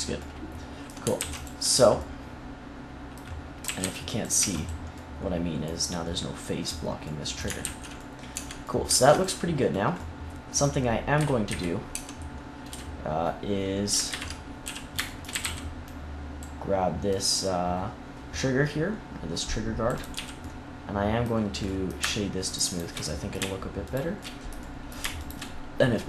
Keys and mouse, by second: 1.1 ctrl+s, 3.6 a, 3.7 c, 4.5 x, 7.5 ctrl+z, 8.3 Tab, 8.8 ctrl+s, 11.1 KP_3, 11.4 KP_1, 11.9 Tab, 12.6 KP_3, 14.0 ctrl+KP_3, 14.6 z, 15.3 a, 15.3 c, 20.1 z, 22.4-23.5 drag.